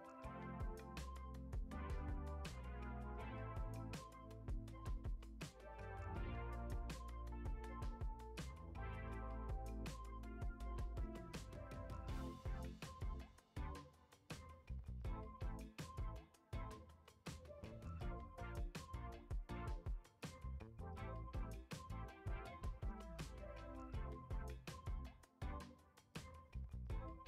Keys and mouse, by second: 1.2-1.7 middle drag, 2.4 e, 4.8 click, 5.1 drag, 5.5-5.9 middle drag, 6.8 alt+shift+click, 8.8 e, 10.8 g, 13.0 click, 14.3 alt+shift+click, 14.5 alt+shift+drag, 14.9 middle click, 15.3 g, 16.3 ctrl+b, 18.5 ctrl+Tab, 19.2-20.1 right drag, 20.8-21.4 middle drag, 21.9 s, 23.7 s, 24.7 shift+a, 26.3 g.